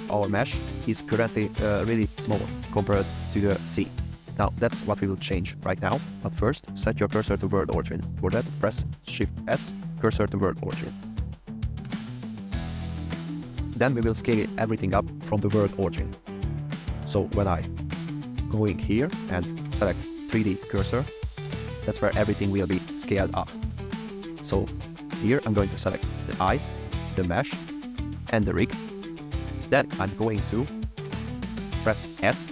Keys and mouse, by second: 0.2 click, 3.1-3.6 drag, 9.3 shift+s, 18.7-20.6 drag, 23.8 shift+middle click, 25.3 click, 25.9 shift+click, 27.5 shift+middle drag, 28.4 shift+click, 32.3 s.